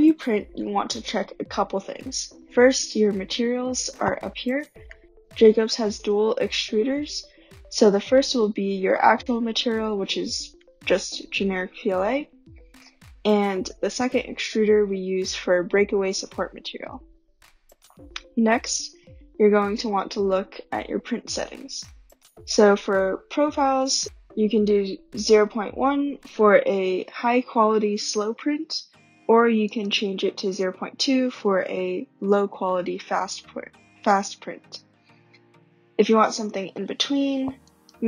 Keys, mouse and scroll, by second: 1.0-1.3 scroll, 25.3 click, 29.8 click, 37.9 click.